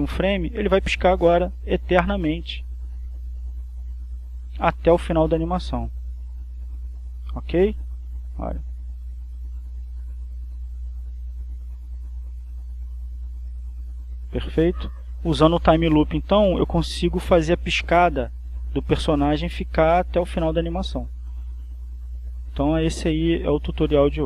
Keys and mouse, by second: 6.1 click, 7.4 click, 8.4-10.0 drag, 14.3 click.